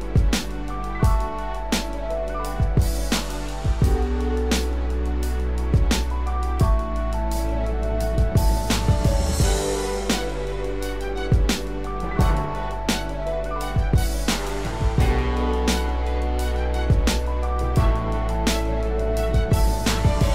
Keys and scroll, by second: 7.1 ctrl+d, 11.1 ctrl+z, 17.6 ctrl+Return, 20.1 ctrl+d.